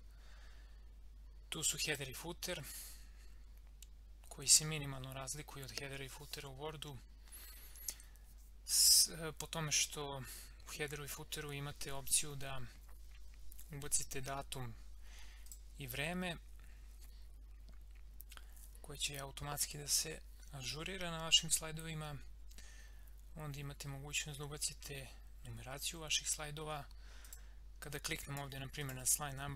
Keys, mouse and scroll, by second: 1.8 click, 15.4 click, 27.2 click.